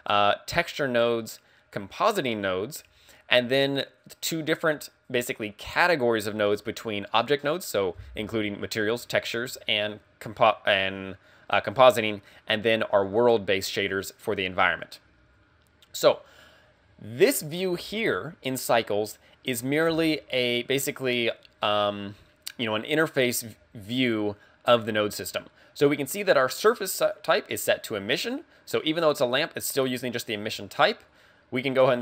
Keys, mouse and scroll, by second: 17.2 click, 27.0 click, 31.7 click.